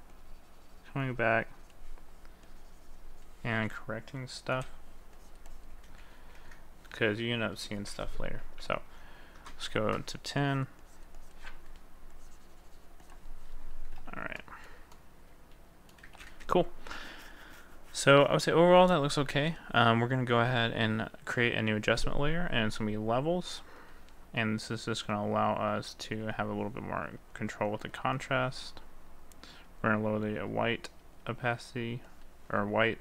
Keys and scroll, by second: 6.3 ctrl+z.